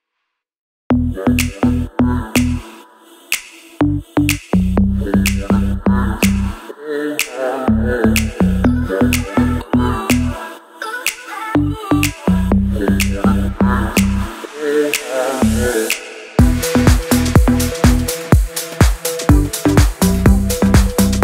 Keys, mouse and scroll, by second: 0.5-2.3 scroll down 1, 4.1-5.3 scroll down 1, 15.7-17.4 scroll down 1, 17.4-18.8 scroll up 1, 19.7 click.